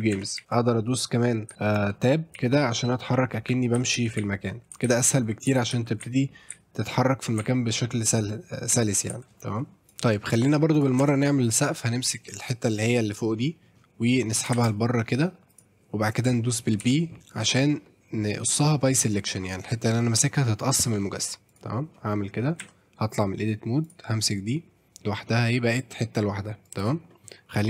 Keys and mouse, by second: 0.1 Tab, 0.4 w, 1.5-9.1 typing, 9.8 Tab, 9.8 click, 10.7 click, 11.0 Tab, 11.4 click, 12.3 middle click, 12.7 middle click, 13.4 middle click, 14.2 middle click, 14.6 shift+d, 15.0 middle click, 15.5 click, 16.8 p, 22.6 Tab, 23.8 click, 25.3 middle drag, 25.7-26.8 drag, 26.6 middle click, 26.6 right click, 27.1 middle drag.